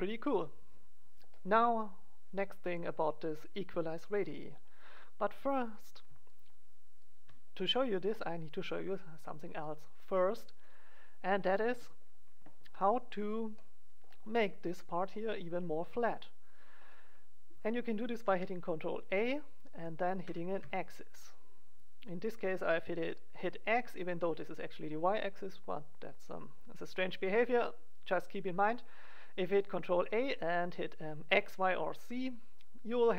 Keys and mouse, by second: 5.6-7.5 right drag, 7.5 click, 7.7-9.4 middle drag, 18.2 ctrl+a.